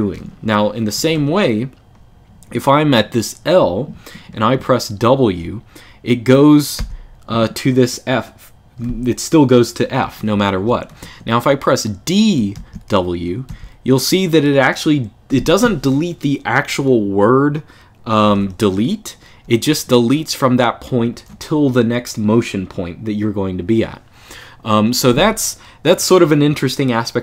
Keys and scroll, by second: 0.7 1, 0.9 1, 6.5 shift+w, 9.8-11.2 typing, 12.3 d, 13.2 w, 18.0 u.